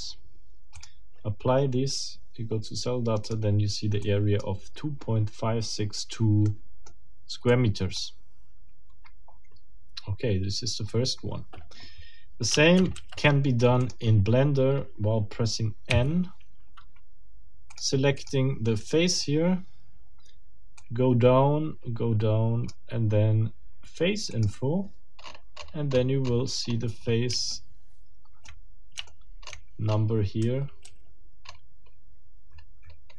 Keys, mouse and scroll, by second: 0.8 click, 3.2 click, 4.0 click, 6.4 click, 7.1 scroll down 2, 7.5-8.1 drag, 15.9 n, 17.7 click, 18.2 click, 18.8 right click, 20.8-21.6 drag, 22.6 click, 24.3 click, 25.2-26.9 scroll up 10, 27.5 shift+middle click, 28.4-28.8 shift+scroll up 1, 29.1 shift+middle click, 29.4-30.2 shift+scroll up 2, 30.4 shift+a, 31.4-31.8 scroll up 2, 32.5 scroll down 2.